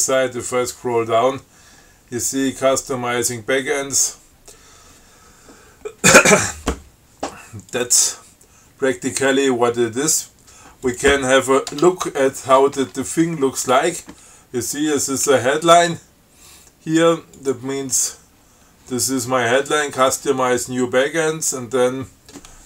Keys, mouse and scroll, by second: 0.1-0.4 scroll down 1, 0.6-2.3 scroll down 7, 2.7 scroll down 2, 4.0 scroll down 2, 4.6 scroll up 1, 5.2-5.5 scroll up 1, 5.9 scroll down 2, 8.0 click, 11.1 click, 12.0 Tab, 13.0 Tab, 17.6 click.